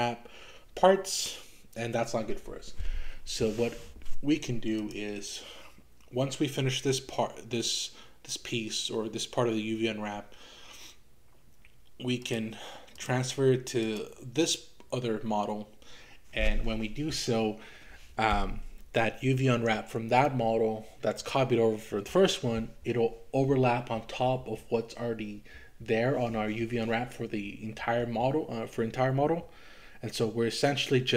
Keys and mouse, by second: 12.3 click, 13.8 click.